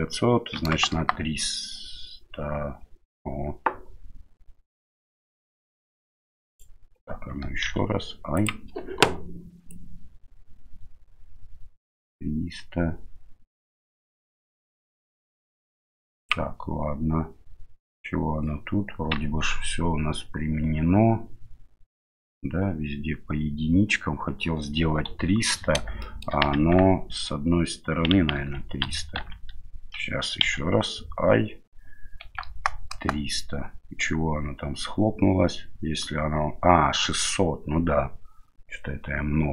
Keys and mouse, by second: 9.7-16.3 drag, 19.3 Tab, 25.1 KP_7, 26.0 shift+middle click, 26.5 Tab, 28.3 ctrl+z, 28.8 ctrl+z, 29.2 ctrl+z, 30.4 i.